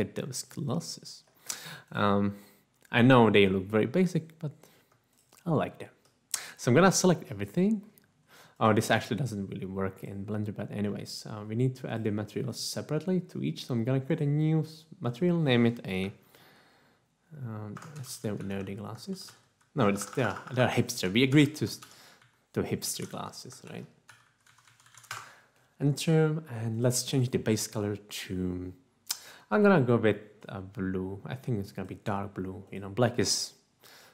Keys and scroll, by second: 16.4 g, 17.8-23.1 typing, 24.7-25.4 typing, 25.4 Return, 29.6-30.4 typing.